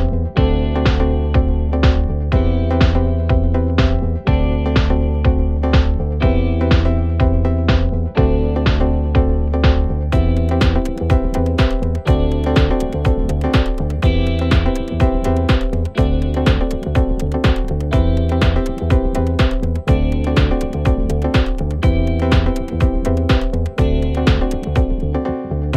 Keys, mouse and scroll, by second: 6.1 alt+scroll up 1, 9.8-10.8 alt+scroll down 1, 12.0-17.4 drag, 13.9-16.7 click, 17.4-18.6 alt+scroll up 2, 18.6-23.6 drag, 21.1-22.0 alt+shift+click, 23.6-25.7 drag.